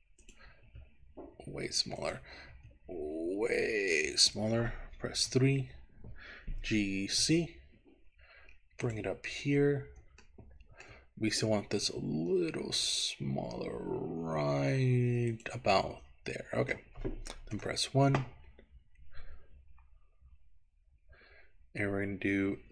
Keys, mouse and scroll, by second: 0.4 click, 0.8 s, 2.1 click, 2.7 s, 4.4 click, 5.2 KP_3, 6.6 g, 7.2 z, 8.9 click, 9.4 scroll up 2, 10.1 scroll up 1, 10.3 shift+middle click, 12.0 s, 15.4 click, 15.9 middle click, 17.6 KP_1, 18.7-19.8 scroll up 4, 19.8-20.5 scroll down 5, 20.6-21.9 scroll up 4.